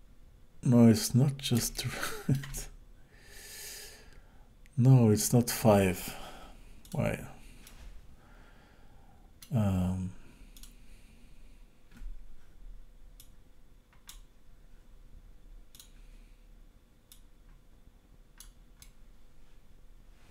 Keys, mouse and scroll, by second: 1.7 shift+middle click, 6.8 click, 7.7 middle click, 10.5 click, 13.2 click, 15.7 click, 17.1 click, 18.8 middle click.